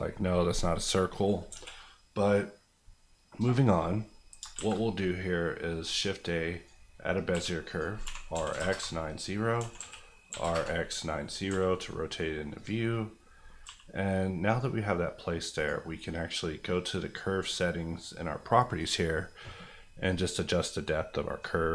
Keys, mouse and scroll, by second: 0.1 scroll down 1, 1.5 KP_1, 3.6 scroll down 1, 4.4 shift+scroll down 1, 4.6 shift+a, 5.8 click, 6.8 scroll down 1, 7.3-8.6 typing, 7.6 click, 8.7 KP_Enter, 9.6 r, 9.7 KP_4, 10.3 KP_5, 10.4 KP_0, 10.5 KP_Enter, 11.2 scroll up 1, 12.5 click, 12.9-13.3 scroll up 1, 13.6 g, 14.4 click, 20.4 click.